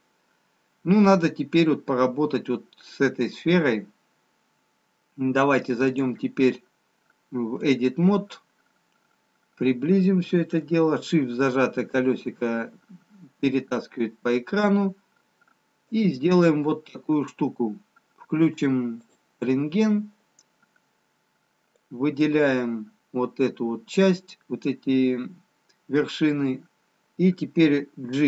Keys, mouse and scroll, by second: 5.8 click, 9.1 scroll up 1, 9.9-11.0 scroll up 5, 11.0 shift+middle click, 15.1-15.9 scroll down 1, 16.1 click, 22.0 click, 28.0 g.